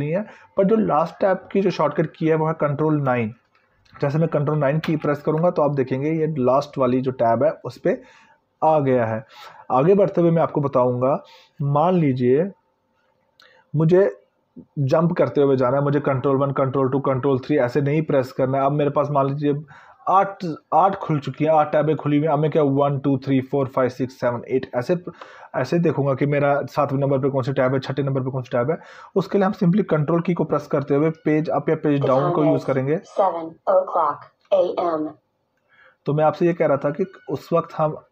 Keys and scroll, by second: 4.6 ctrl+9.